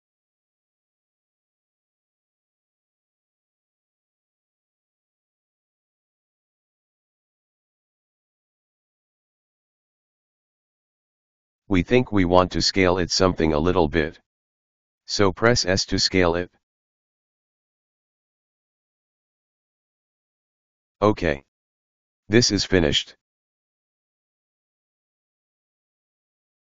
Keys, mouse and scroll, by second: 0.1 right click, 0.5-3.3 middle drag, 3.3 n, 3.9-4.3 scroll down 3, 4.3-5.2 scroll up 4, 5.2 scroll down 1, 5.6-5.9 scroll up 2, 6.2-7.3 scroll down 2, 7.5-8.6 scroll down 1, 8.6 middle click, 8.8 right click, 9.8 right click, 11.9 ctrl+s, 14.6 s, 19.6-22.6 middle drag.